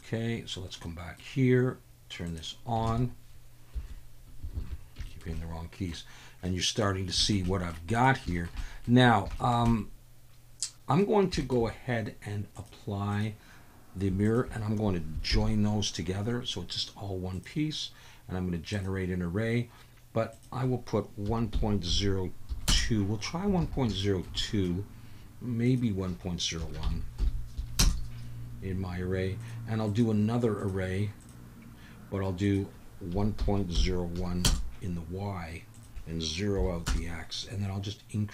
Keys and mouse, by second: 0.0 click, 0.8-1.2 middle drag, 2.4-2.9 drag, 4.5 alt+a, 5.0 shift+middle drag, 5.4-5.9 middle drag, 6.4 middle click, 7.2 shift+middle drag, 7.4 middle drag, 7.9 click, 8.3 shift+middle click, 8.6 middle drag, 9.4 shift+middle click, 9.7-11.0 middle drag, 11.4 shift+middle click, 12.5-13.2 drag, 14.2 shift+click, 15.3 ctrl+j, 17.3-18.9 drag, 20.3-22.7 drag, 23.6 alt+a, 24.0 shift+middle click, 24.4 middle click, 25.6-27.9 drag, 29.4 drag, 29.9-31.3 drag, 32.4-34.5 drag, 35.7-36.9 drag.